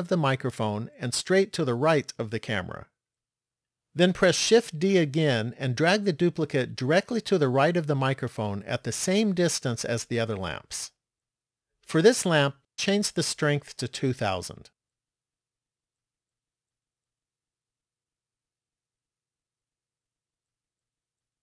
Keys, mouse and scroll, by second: 5.0 shift+d, 12.5 click, 14.3 KP_0, 17.8-18.6 scroll up 5, 19.1-20.5 scroll up 2, 20.7 middle click.